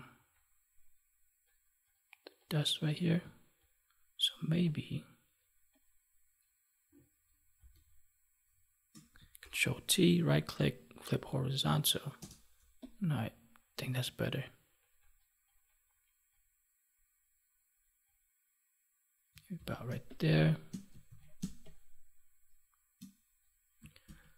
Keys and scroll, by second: 7.5 ctrl+z, 9.3 ctrl+t, 19.5 ctrl+s, 19.8 space, 21.0 ctrl+s, 21.3 space, 24.0 ctrl+Tab.